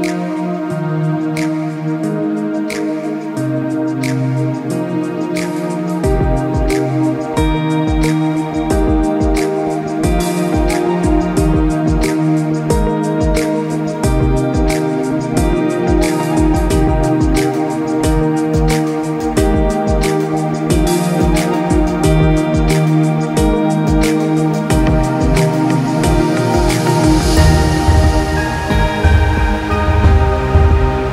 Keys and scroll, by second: 27.9 ctrl+0, 28.0 ctrl+z.